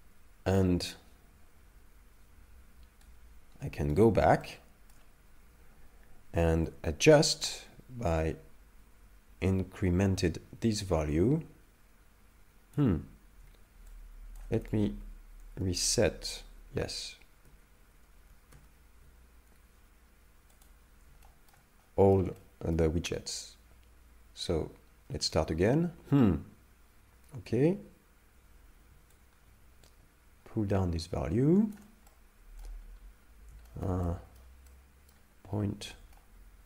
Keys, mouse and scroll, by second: 3.1 right click, 4.4 shift+middle click, 6.7 shift+click, 13.9 shift+click, 14.6 a, 14.9 a, 15.8 alt+g, 17.5 alt+r, 18.5 alt+s, 20.5 click, 21.2 shift+middle click, 21.8 middle click, 22.4 shift+middle click, 24.5 right click, 24.6 right click, 25.3 right click, 29.2 shift+click, 32.1 middle click, 32.8 scroll up 1, 33.3-33.7 scroll down 1, 33.7 shift+middle click, 34.0 middle click, 34.7 middle click, 35.4 scroll up 1, 35.4 shift+middle click, 35.8 scroll down 1, 36.2 ctrl+middle click.